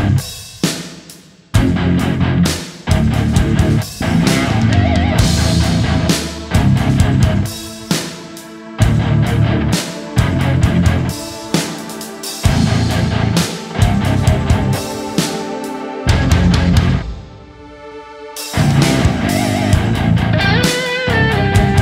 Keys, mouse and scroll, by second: 0.6 shift+click, 1.0 alt+right click, 1.2 alt+right click, 2.6 alt+right click, 5.4 alt+right click, 6.4 right click, 7.7 ctrl+d, 7.9 ctrl+d, 15.7 right click, 16.9 x, 17.9 right click, 21.3-21.8 typing.